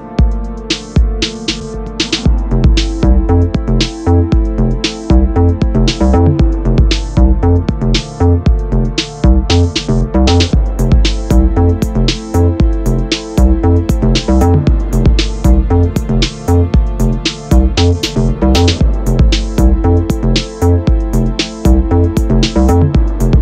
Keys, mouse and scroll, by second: 0.0-0.5 scroll down 1, 0.5-1.6 middle drag, 1.6 scroll down 2, 1.9-3.4 middle drag, 3.4-3.7 scroll down 2, 3.7 middle click, 4.1-4.7 scroll up 1, 4.7 shift+a, 7.5 g, 9.2 s, 11.2-11.6 scroll up 1, 11.6-12.0 scroll down 2, 12.0-13.3 middle drag, 13.3 Tab, 14.2 ctrl+r, 16.1-19.0 drag, 19.0 ctrl+r, 20.6 ctrl+r, 22.1-23.4 drag.